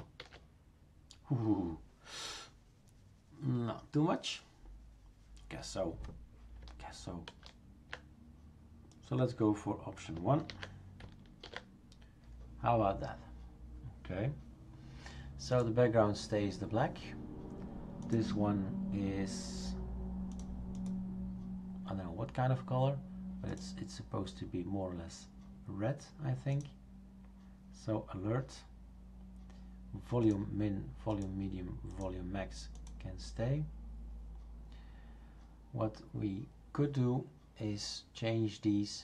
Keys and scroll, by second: 0.2 ctrl+s, 7.3 ctrl+z, 10.5 ctrl+v, 11.4 ctrl+s.